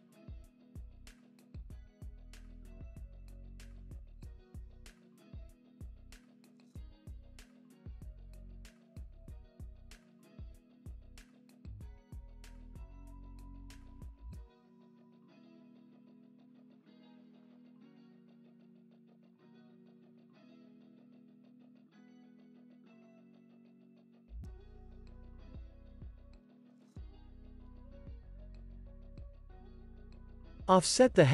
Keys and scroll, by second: 4.2 super+c, 5.3 super+v, 5.5 super+s, 7.4 c, 7.6 super+v, 8.0 super+s, 10.0 z, 10.3 x, 22.7 super+c, 23.5 super+v, 23.8 super+s, 25.0 x, 25.4 super+v.